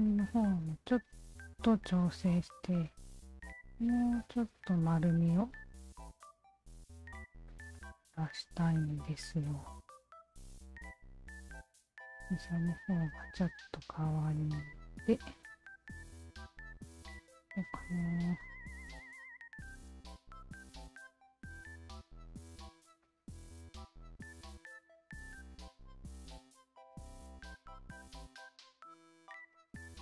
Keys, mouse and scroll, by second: 0.5 alt+click, 1.7 w, 2.8-4.5 alt+shift+drag, 4.9 alt+click, 5.2 alt+click, 6.1-7.2 shift+drag, 7.5 alt+click, 7.7-9.8 alt+drag, 10.1 alt+click, 10.9 alt+click, 13.5 shift+click, 14.4-15.5 alt+shift+drag, 16.2-18.8 alt+shift+drag, 19.1 shift+click, 20.9 shift+click, 21.7 shift+click, 23.0 shift+click, 23.4-27.0 shift+drag, 27.1 alt+click, 27.7 alt+click, 29.5 shift+click.